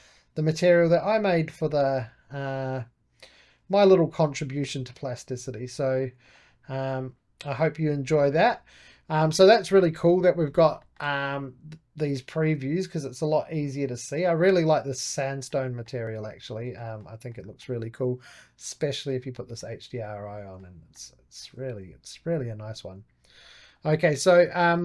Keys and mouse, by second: 0.0-3.0 drag, 3.1 click, 3.5 2, 3.8 Escape, 4.1-6.2 drag, 6.2 right click, 6.8-13.2 middle drag, 14.2-15.4 drag, 15.4-18.7 middle drag, 18.7 click, 19.3-20.9 middle drag, 20.9 click, 21.1 middle click, 21.6 2, 22.2-23.7 drag, 23.7 right click, 24.2-24.8 middle drag.